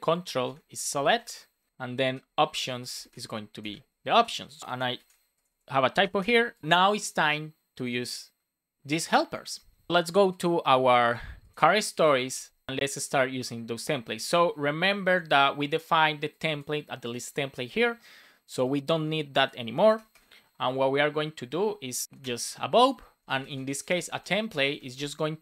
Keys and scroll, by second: 0.0-0.4 typing, 1.3 Right, 1.7 space, 3.5 space, 4.0 super+s, 4.9 super+c, 5.8 super+v, 6.1 super+s, 19.9 BackSpace, 20.9 BackSpace, 22.0 Return, 23.2 Return, 23.5 space, 23.8 shift+t, 24.5 Return, 24.7 space.